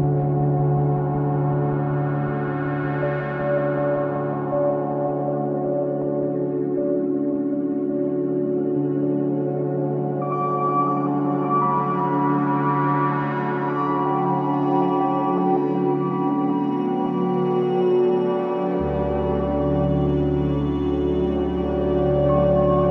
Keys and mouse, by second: 0.0 Return, 1.2-2.4 typing, 1.2-2.1 drag, 3.1 click, 8.1 space, 11.0 space, 11.7 click, 14.0 ctrl+s, 17.5 click, 18.1 click, 18.7 click, 20.0-22.6 drag.